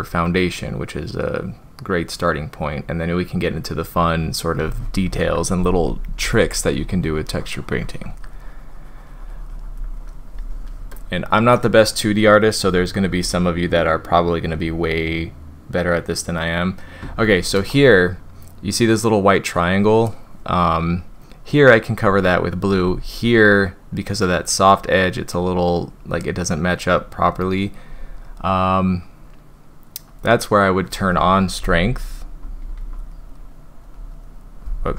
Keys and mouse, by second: 5.2-6.0 typing, 6.2-9.8 drag, 10.9-11.5 drag, 12.6 [, 12.8 [, 13.0 [, 13.2 [, 13.3-14.6 drag, 17.2 ctrl+z, 21.0-22.0 drag, 25.4-27.3 drag, 30.1 click, 31.6-32.3 ], 32.6 ], 32.7 ], 32.9-33.3 drag, 33.4-33.8 drag, 33.9-34.2 drag.